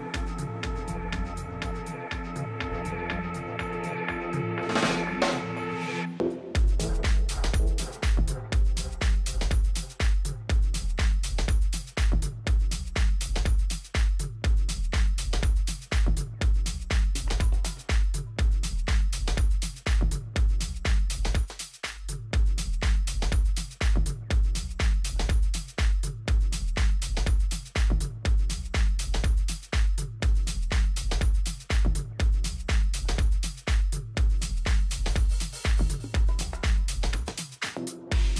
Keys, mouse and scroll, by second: 9.3 Tab, 9.9 Tab, 10.6 a, 10.9 a, 11.8-13.6 right drag, 12.5 Tab, 13.6 middle click, 14.1 a, 14.5 a, 14.9 a, 17.7-19.4 drag, 18.4 a, 18.7 a, 21.9 b, 24.9 g, 33.2-36.9 middle drag, 33.7 a, 34.2 z, 35.5 Tab, 36.6 Tab, 38.1-38.3 middle drag.